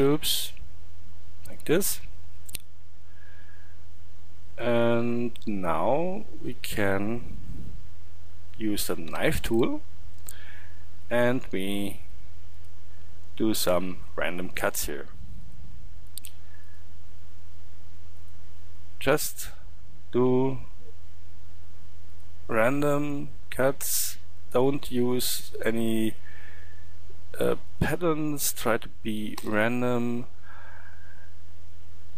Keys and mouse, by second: 1.7-2.3 drag, 2.4 click, 3.4-9.1 middle drag, 9.1 k, 30.5-32.1 middle drag.